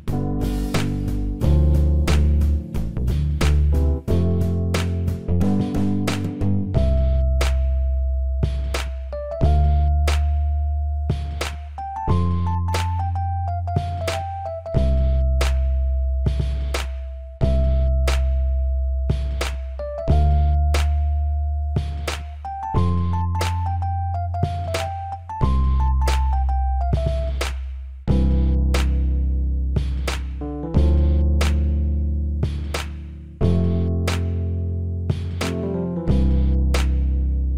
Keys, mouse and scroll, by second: 0.8-2.5 middle drag, 3.7 t, 5.4-9.3 middle drag, 9.6-11.4 drag, 11.8-13.9 middle drag, 18.5-21.8 drag, 22.1-31.9 drag, 32.1-37.5 drag.